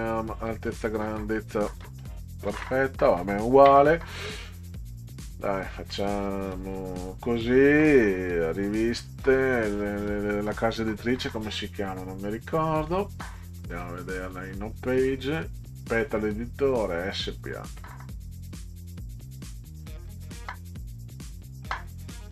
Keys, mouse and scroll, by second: 0.5 click, 0.7 click, 0.9 click, 2.5 ctrl+a, 5.1 click, 5.6 click, 5.9 click, 6.2 click, 8.2 click, 9.5 scroll up 2, 11.1 scroll up 2, 12.9-22.3 drag.